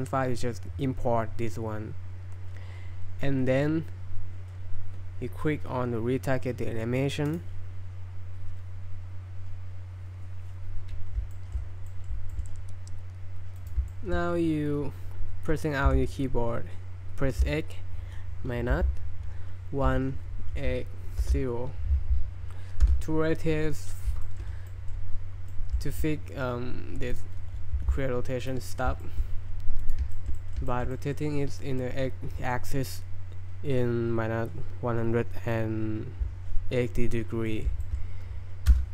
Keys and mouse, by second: 11.3 shift+middle drag, 11.9 middle click, 12.3 shift+middle click, 13.6 right click, 13.9 shift+middle drag, 15.9 r, 17.3 x, 18.7 -, 19.9 1, 20.6 8, 21.2 0, 22.9 Return, 24.2 shift+middle drag, 24.7 middle drag, 25.5 middle drag, 25.8 shift+middle click, 27.8 g, 28.4 right click, 28.6 middle drag, 29.0 shift+middle drag, 29.8 click, 30.1 shift+middle drag, 30.4 middle drag, 30.7 shift+drag, 30.9 click, 31.6 drag, 37.5 click, 37.8 shift+drag, 38.7 space.